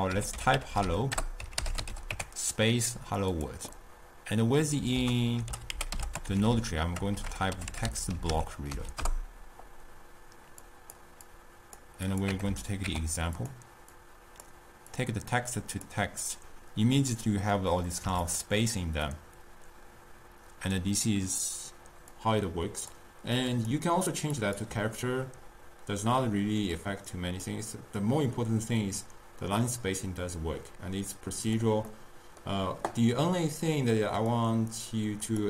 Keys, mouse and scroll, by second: 0.2-1.9 typing, 1.2 Return, 3.7 click, 3.9-5.0 middle drag, 5.0 ctrl+a, 7.2 BackSpace, 7.3 BackSpace, 11.5-18.4 drag, 19.1-22.2 middle drag, 22.2-26.2 drag, 26.2-27.5 middle drag, 27.5-31.9 drag, 31.9-34.3 middle drag, 34.3-35.4 drag.